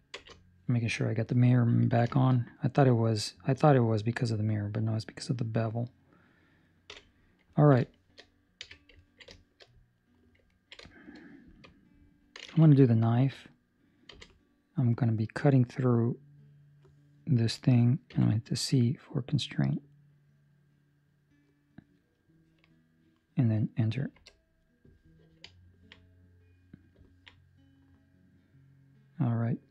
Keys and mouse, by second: 0.1 ctrl+space, 1.8 ctrl+middle click, 2.0 shift+middle click, 2.3 middle click, 6.8 KP_7, 7.5 ctrl+middle click, 8.0 shift+middle click, 8.5 1, 9.1 ctrl+middle click, 9.5 shift+middle click, 9.9 right click, 10.4 ctrl+middle click, 10.8 shift+middle click, 13.1 k, 25.6 ctrl+middle click, 26.0 middle click, 27.0 ctrl+middle click, 27.3 middle click.